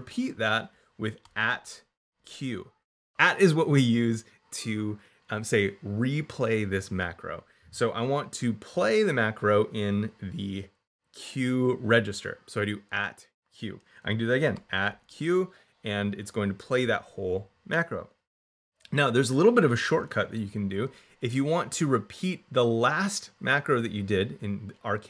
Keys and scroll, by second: 1.1 shift+2, 2.0 shift+q, 14.4 shift+2, 14.7 shift+q, 15.6 q.